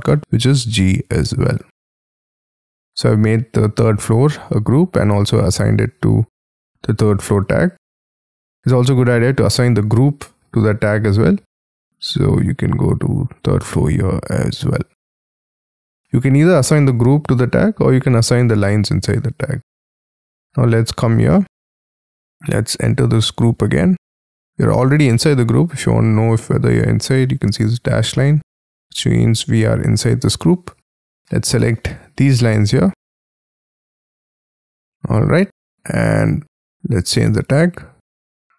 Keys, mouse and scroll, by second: 0.1 middle click, 1.1 scroll down 3, 2.8-3.8 scroll down 13, 3.8 scroll up 7, 4.5 scroll up 5, 15.1 double click, 15.5 scroll down 8, 16.2 scroll down 1, 16.3-17.8 scroll up 6, 17.8-19.0 scroll down 18, 19.2-20.0 scroll up 19, 20.1 middle click, 20.8-21.1 scroll down 4, 21.3 middle click, 23.3 double click, 24.1 Escape, 24.8 middle click, 25.2-26.3 scroll down 23, 26.3 middle click, 28.1 middle click, 28.7-30.1 scroll up 25, 30.3 scroll down 3, 31.3 middle click, 34.1-34.8 scroll up 3, 34.8 scroll up 4, 35.2-35.5 scroll down 8.